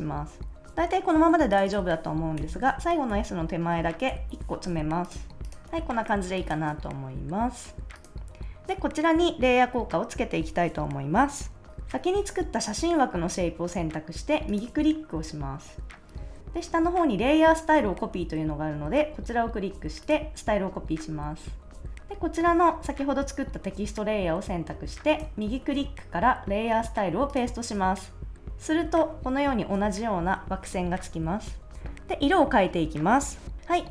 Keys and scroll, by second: 2.3 Right, 3.0 Left, 4.0 alt+Left, 5.6 super+s.